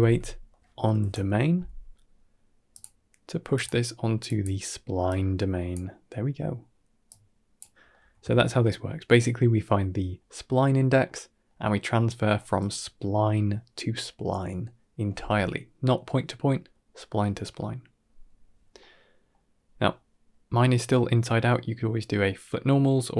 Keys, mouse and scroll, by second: 3.4-4.3 drag, 4.9-5.6 drag, 6.9 click, 7.8 middle click, 8.1 ctrl+middle click, 8.6 middle click, 10.9-11.3 middle drag, 12.2 middle click, 16.3 middle click, 18.7-19.2 middle drag, 19.8 scroll down 3, 20.1-20.5 middle drag, 21.0 drag, 21.3 g, 22.3 middle click.